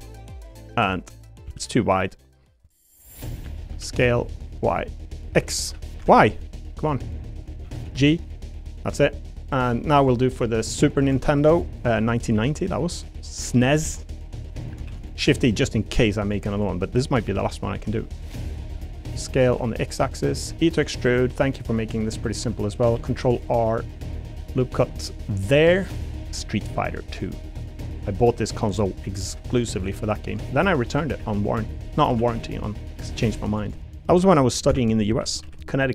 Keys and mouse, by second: 0.8 click, 1.4 s, 2.6 click, 3.3 l, 3.7 s, 4.3 u, 5.2 x, 6.4 u, 6.4 y, 7.6 a, 7.8 g, 10.7 middle click, 11.2 shift+middle click, 11.8 middle click, 12.3 s, 13.0 y, 14.9 shift+d, 17.3 s, 17.7 u, 17.8 y, 19.1 s, 19.4 x, 20.3 click, 20.5 e, 21.9 click, 22.3 middle click, 22.9 ctrl+r, 24.2 click, 25.8 3, 26.5 e, 27.8 click, 28.1 middle click, 29.2 ctrl+r, 30.9 click, 31.2 ctrl+r, 32.1-35.9 typing, 33.6 middle click.